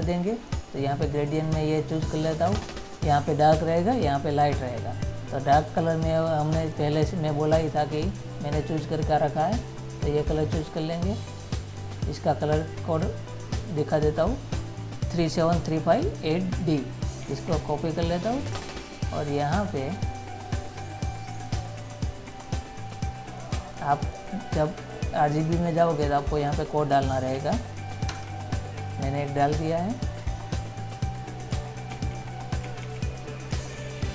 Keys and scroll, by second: 17.5 ctrl+c, 27.7 ctrl+v, 32.2 ctrl+z.